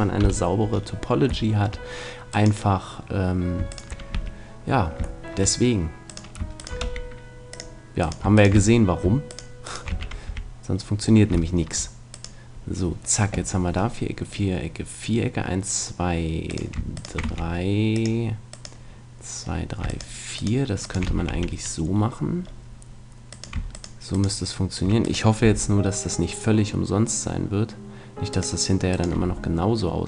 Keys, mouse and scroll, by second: 0.2 KP_1, 1.5-3.4 middle drag, 2.3-4.1 right drag, 4.1 f, 5.2 middle click, 6.8 w, 8.5 f, 9.9 f, 10.3 a, 10.7 middle click, 10.9 right click, 11.0-13.3 middle drag, 12.1-13.9 right drag, 16.5-22.4 right drag, 17.2 w, 21.1 f, 21.3 a, 22.4 middle click, 23.3-26.8 right drag, 25.4 g, 28.4 click, 28.9 right click, 29.1 g.